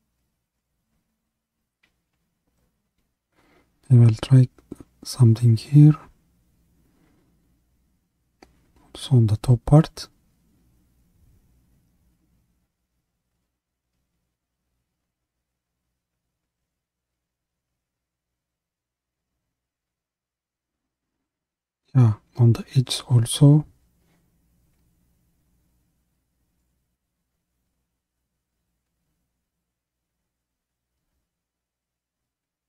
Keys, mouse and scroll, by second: 12.7-13.3 scroll up 1, 13.3-16.3 middle drag, 16.3-23.3 drag, 23.3-24.5 middle drag, 24.5-25.1 scroll up 1, 25.1-29.1 middle drag, 29.1-32.6 drag.